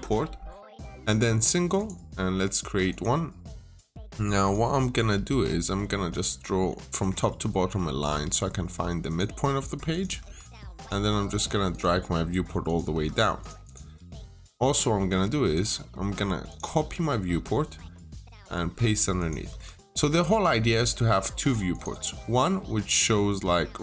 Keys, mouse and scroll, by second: 0.9 click, 4.6 Escape, 4.7-5.5 typing, 5.9 click, 6.3 middle click, 6.8 click, 7.1 Escape, 7.3 scroll down 1, 7.4 middle click, 7.6-7.9 scroll up 1, 7.7-8.5 typing, 8.7 Return, 8.9 click, 10.0 Escape, 10.6 click, 12.8 Escape, 13.2 click, 13.5 double click, 13.8 Delete, 14.4 middle click, 14.5 Escape, 14.7 middle click, 15.0 scroll up 1, 15.4 click, 15.7-16.1 scroll down 1, 16.3 click, 16.4-17.2 typing, 18.0 click, 19.3 Escape, 20.5 scroll up 1, 20.9 scroll down 1, 21.0 middle click, 21.6 click, 21.7 double click, 22.2 scroll down 1, 22.5 middle click.